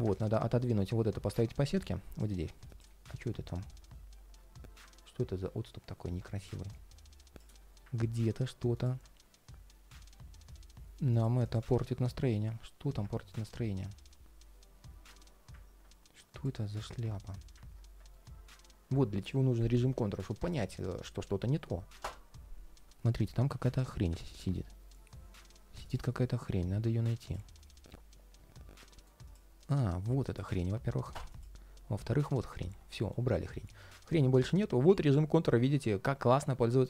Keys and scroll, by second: 16.5 ctrl+shift+3, 17.9 ctrl+shift+3, 30.0 shift+super+g, 32.7 ctrl+3, 33.9 ctrl+shift+3.